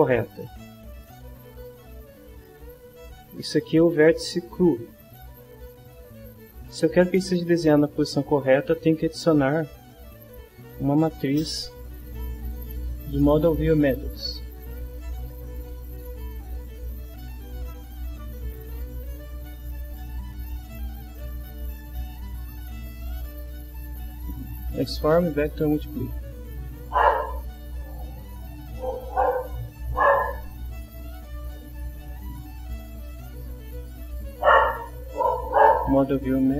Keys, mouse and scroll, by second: 2.9-4.3 drag, 10.2-11.3 right drag, 26.1 click, 27.0-28.0 drag, 29.3 click, 31.9-35.3 drag.